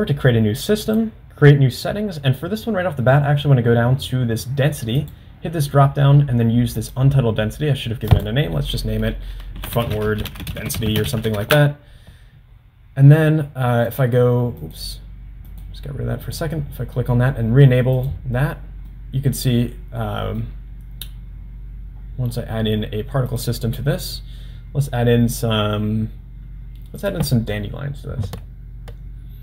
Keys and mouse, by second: 1.4 click, 5.0-7.4 drag, 8.3-12.6 drag, 10.6 d, 14.0-14.7 drag, 15.5-16.9 drag, 18.5 drag, 19.0-20.4 middle drag, 23.3-29.4 drag.